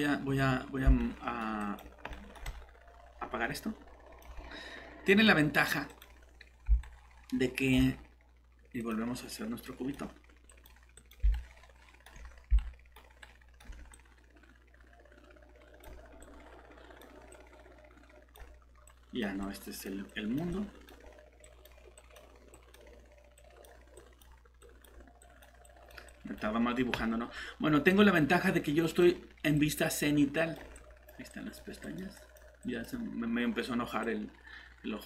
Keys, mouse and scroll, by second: 1.0 right click, 1.6 click, 2.1 right click, 2.4 click, 6.8 right click, 8.8 click, 11.3 right click, 13.9 click.